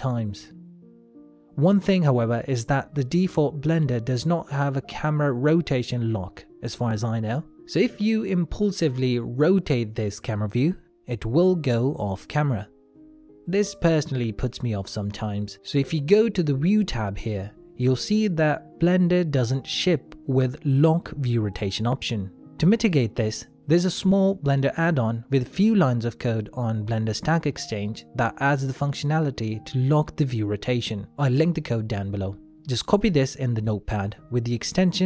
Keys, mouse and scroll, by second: 0.4 z, 3.5 middle click, 4.9 click, 6.1 middle click, 8.7 KP_0, 10.3 middle click, 11.8 KP_0, 17.5 click, 17.7 n, 18.9 click.